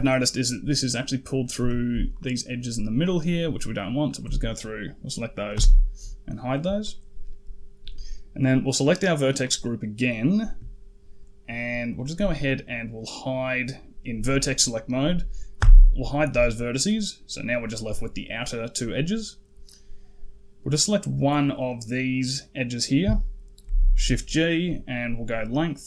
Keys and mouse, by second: 0.9 click, 1.2 middle click, 2.0 shift+click, 2.3 shift+middle click, 2.9 shift+click, 3.1 shift+middle click, 3.8 shift+click, 5.4 h, 6.2 middle click, 8.4 click, 10.1 click, 15.4 h, 16.1 middle click, 20.6 click, 23.5 shift+g.